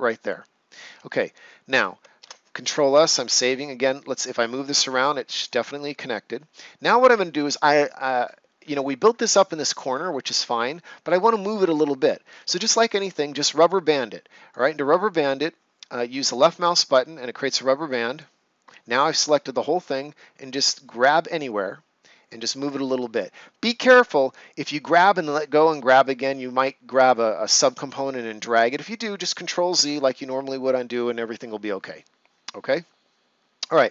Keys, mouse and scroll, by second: 0.2 right click, 1.0 ctrl+scroll down 1, 1.4 right click, 2.1 ctrl+s, 3.8 click, 8.2-8.8 scroll down 2, 9.2 right click, 10.1-10.7 ctrl+scroll up 1, 12.1 ctrl+scroll up 1, 12.5 right click, 14.4 click, 20.8 click.